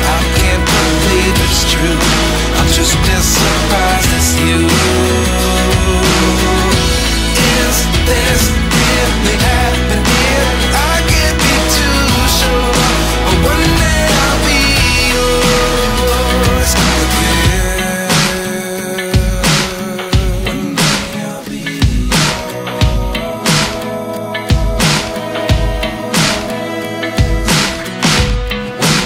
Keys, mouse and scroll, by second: 4.5 ctrl+z, 10.0 ctrl+t, 13.6 alt+shift+click, 20.4 alt+shift+click, 21.1 alt+shift+click.